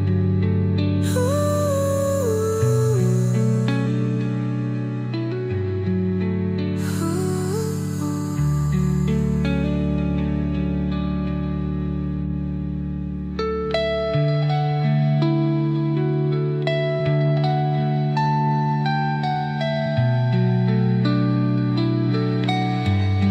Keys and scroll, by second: 0.2 ctrl+z, 14.9 ctrl+z.